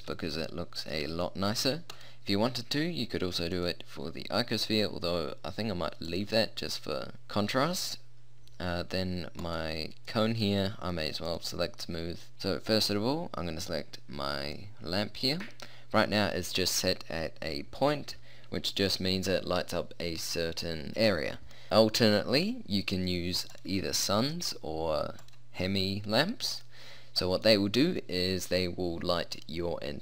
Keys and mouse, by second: 0.2 click, 0.5 middle click, 1.9-3.5 right drag, 3.5-5.1 middle drag, 5.1 click, 6.1-8.9 drag, 8.9 middle click, 9.5-11.3 right drag, 11.3-12.3 drag, 12.3-14.1 right drag, 14.5 middle click, 23.6-25.3 drag, 26.7 click.